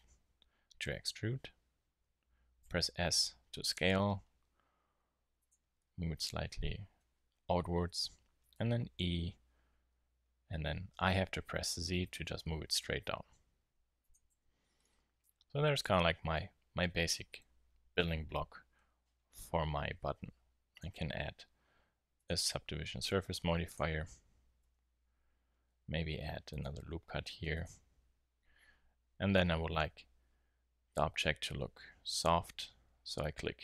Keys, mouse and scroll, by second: 5.4 click, 8.9 e, 14.3 Tab, 14.5-15.5 middle drag, 16.0 middle click, 16.2-16.6 middle drag, 18.7-20.7 middle drag, 20.7-22.7 drag, 24.6 Tab, 26.1 ctrl+r, 27.9 Tab, 29.3 t, 33.2-33.6 drag.